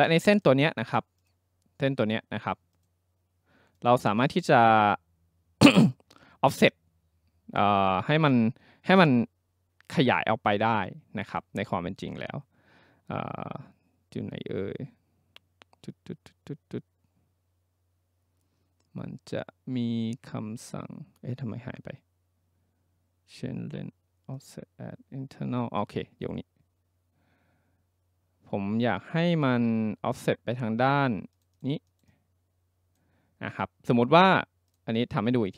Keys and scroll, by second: 35.4 ctrl+z.